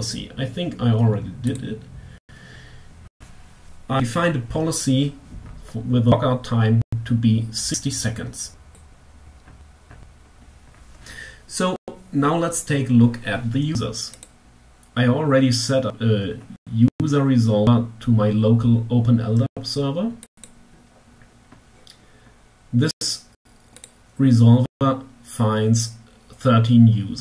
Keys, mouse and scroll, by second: 0.2 click, 7.7 click, 13.5 click, 19.6 click, 21.7 scroll down 2, 22.9 click, 26.3-26.6 scroll up 2.